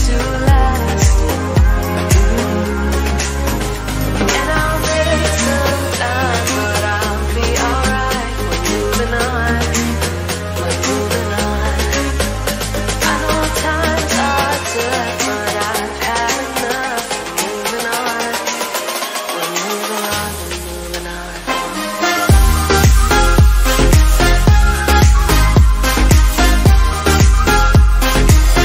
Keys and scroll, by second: 7.9 ctrl+0, 8.7 ctrl++.